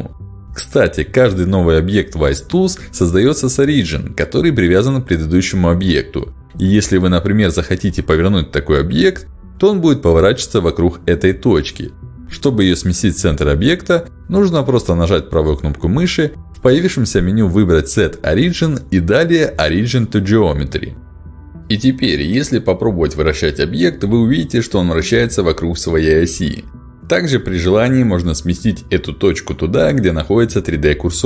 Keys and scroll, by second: 1.3 g, 8.7 r, 12.0 ctrl+z, 22.2 r, 24.1 ctrl+z.